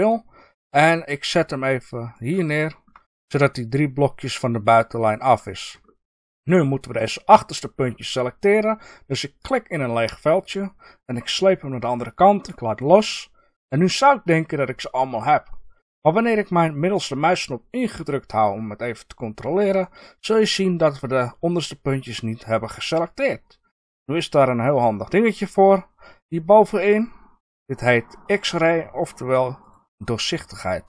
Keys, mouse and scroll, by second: 2.2 click, 2.8-5.2 middle drag, 3.0-5.2 scroll up 2, 5.2 scroll down 1, 6.0-6.4 scroll up 2, 6.0 middle click, 6.4 click, 9.4 click, 17.9-29.6 middle drag, 29.6 click.